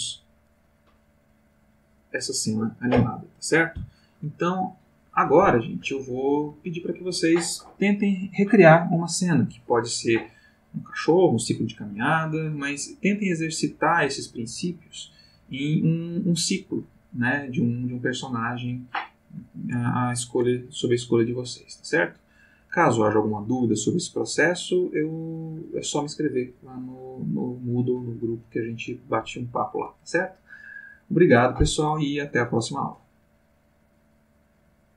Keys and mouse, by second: 34.9 click.